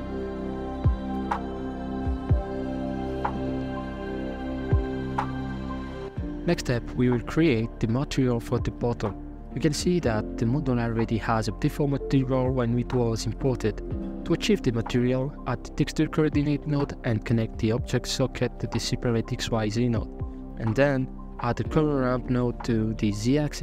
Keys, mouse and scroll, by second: 0.2-0.6 scroll down 1, 0.6 right click, 0.7 middle click, 0.8 Tab, 1.0 Tab, 1.3-2.9 typing, 2.7 middle click, 3.0 middle drag, 3.2 scroll down 8, 3.3 middle click, 3.4 right drag, 3.5 middle click, 3.9 click, 4.0 middle click, 6.3 right click, 6.8-7.2 shift+middle drag, 7.2 scroll up 2, 9.0 z, 10.0-10.8 shift+middle drag, 10.8 ctrl+right click, 13.0 x, 17.3 click, 18.0 shift+a, 20.1 shift+a.